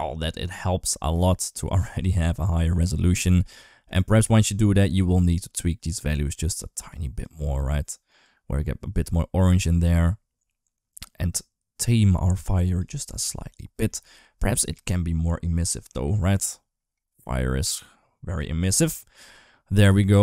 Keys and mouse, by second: 2.7 middle click, 3.7 click, 5.1 click, 5.7 click, 6.7 click, 7.4 click, 8.0-9.5 drag, 9.8-12.6 drag, 13.7 middle click, 14.5-18.1 drag.